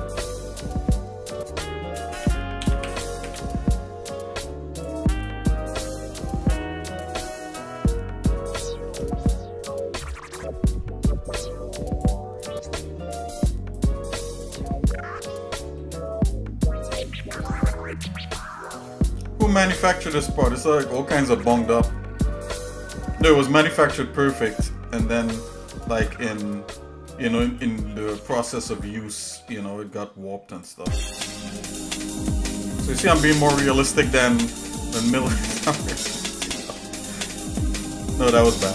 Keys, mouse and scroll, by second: 2.1 w, 2.6 w, 2.9 w, 3.4 w, 4.1 click, 5.2 click, 6.4-8.9 shift+middle drag, 9.4 click, 10.8-12.1 drag, 12.6 click, 13.9 click, 14.7-15.8 shift+middle drag, 16.5 click, 17.6-18.7 drag, 19.2 click, 20.6 click, 20.8 click, 21.6 middle click, 23.8 click, 25.8 shift+middle click, 27.0 shift+middle click, 27.6-28.7 drag, 29.5-30.8 drag, 31.8-32.9 drag, 33.2 shift+middle click, 34.0 scroll down 1, 34.6 scroll down 2, 34.7 shift+middle click, 35.8 shift+middle click, 36.3 middle click, 36.8-37.3 scroll up 3, 37.6 middle click, 38.5-38.7 shift+middle drag.